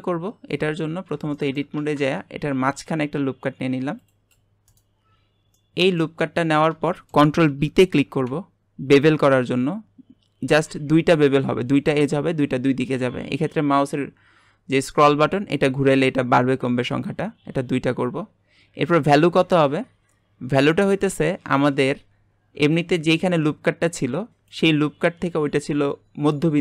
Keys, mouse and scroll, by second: 0.7 Tab, 1.0 scroll down 2, 1.3 shift+middle click, 1.7 alt+a, 2.4 ctrl+r, 5.3 scroll up 1, 5.6 middle click, 6.1 scroll up 1, 6.9-8.0 shift+middle drag, 8.0 ctrl+b, 21.3-21.9 scroll up 3.